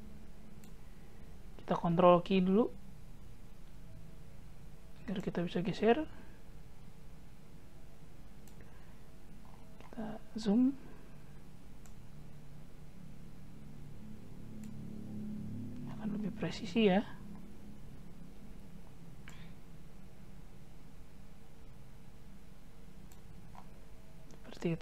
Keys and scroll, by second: 3.2 ctrl+q.